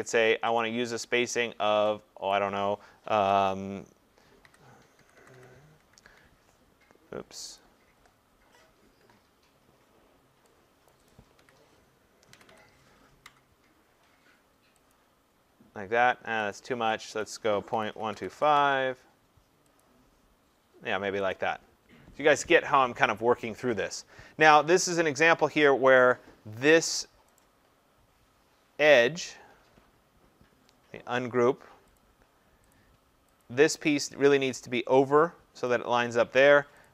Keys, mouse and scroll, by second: 0.6 click, 2.3 click, 4.4-5.3 typing, 5.9 Tab, 7.6 click, 10.9 click, 11.0 typing, 11.4-11.9 scroll, 12.4 typing, 13.2 Tab, 14.9 click, 16.5 click, 17.2 click, 17.7 scroll, 18.0-18.3 typing, 18.5 Tab, 19.8 click, 21.3 click, 26.0 click, 27.4 right click, 32.0 click, 32.7 click, 33.4 click, 35.7 click, 36.8 click.